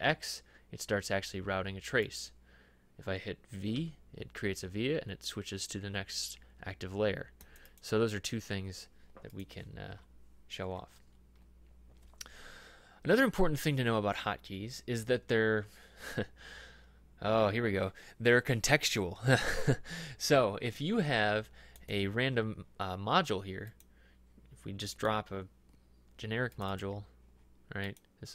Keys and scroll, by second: 3.8 v, 10.0 Escape.